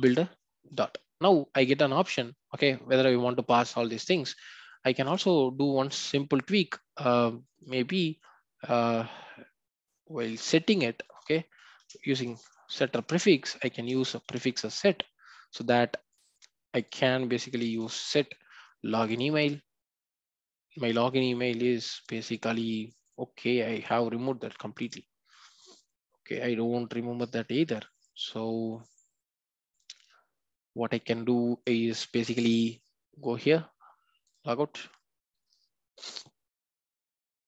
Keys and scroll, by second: 0.0 Return, 5.1 ctrl+b, 12.9 Return, 27.9 Delete.